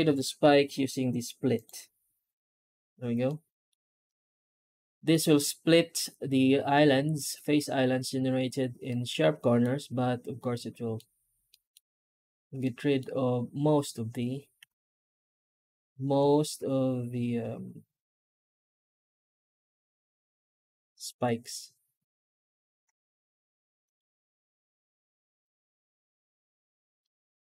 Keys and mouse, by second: 3.1-3.5 middle drag, 4.0-5.0 middle drag, 8.7-9.5 middle drag, 10.5-10.8 middle drag, 11.4 middle drag, 12.5-12.9 middle drag, 14.4 F9, 26.9-27.5 middle drag.